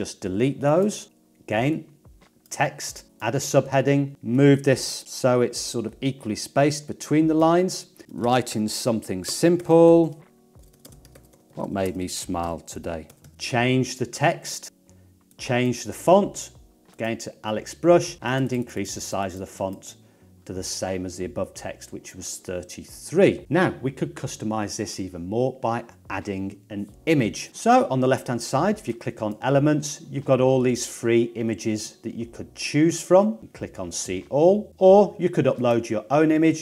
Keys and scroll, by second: 0.2 BackSpace, 1.0 BackSpace, 8.0-13.2 typing.